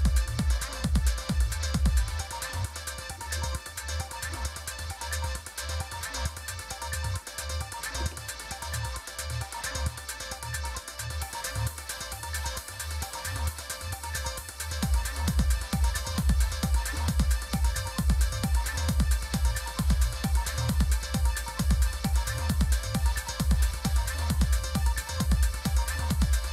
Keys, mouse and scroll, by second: 0.7 super+9, 1.8 alt+super+d, 3.1 Down, 3.3 Down, 3.5 Down, 4.3 Return, 10.0 click, 12.7 click, 15.2 click, 18.5 click.